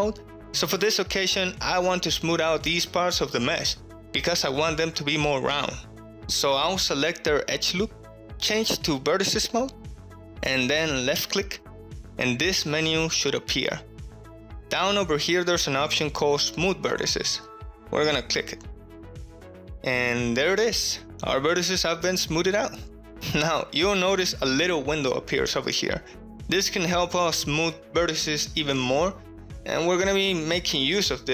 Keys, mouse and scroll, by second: 0.8 1, 1.6 click, 4.5 2, 4.8 alt+click, 5.8 middle click, 6.4 alt+shift+click, 7.0 middle click, 8.4-9.4 middle drag, 10.9 click, 12.3 right click, 18.8-20.8 right drag, 20.8 middle click, 22.2 middle click, 26.2 click.